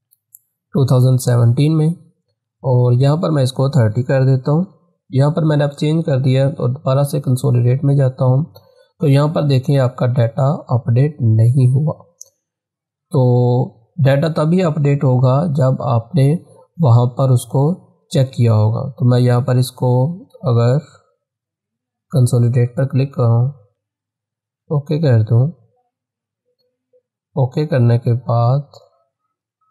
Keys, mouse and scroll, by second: 1.2 click, 3.9-4.7 typing, 12.9 click, 19.2-22.0 drag.